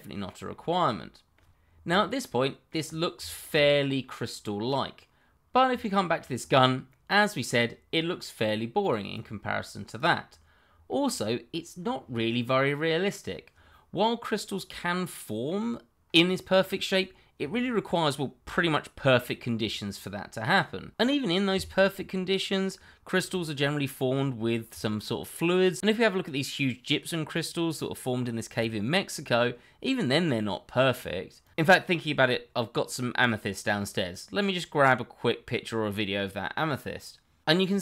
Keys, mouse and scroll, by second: 1.6-2.0 scroll down 1, 2.0 middle click, 3.2 shift+middle click, 3.3 middle click, 5.8 shift+middle click, 6.3 scroll up 1, 6.9 middle click, 7.9 scroll down 1, 8.8 click, 9.2 double click, 9.9 click, 10.2-10.7 scroll down 1, 10.8 shift+middle click, 10.9 middle click, 11.0 shift+middle click, 11.1-11.8 scroll up 1.